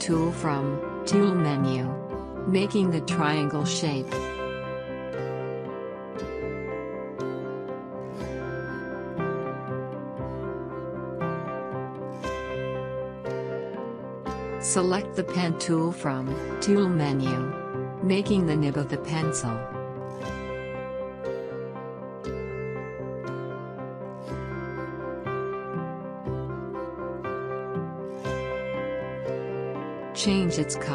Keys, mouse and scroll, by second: 0.5 scroll down 1, 2.7-12.0 drag, 12.5 scroll down 1, 14.2 click, 15.2 scroll down 1, 16.7 alt+scroll down 1, 18.5 click, 18.5 click, 22.4 click, 24.7 click, 27.7 click.